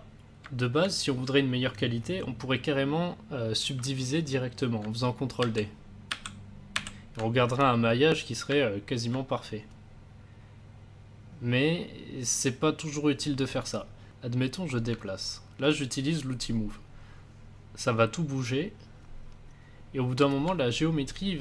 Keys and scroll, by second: 0.8 a, 5.4 ctrl+d.